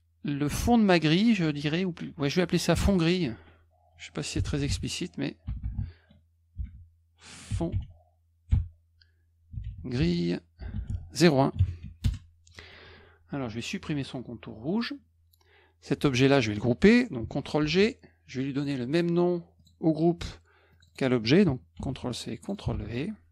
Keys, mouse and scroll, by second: 2.6 click, 2.8 click, 4.1-11.3 typing, 12.0 Return, 14.6 middle click, 17.6 ctrl+g, 18.5 click, 19.5 click, 20.7 click, 20.8 click, 21.7 ctrl+c, 22.4 click, 22.5 click, 22.7 ctrl+v.